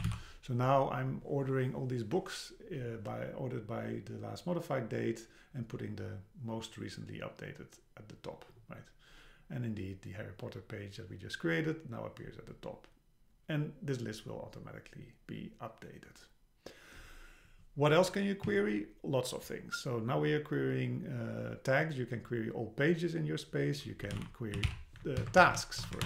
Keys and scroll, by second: 18.5 Down, 25.2 Down, 25.4 super+Left.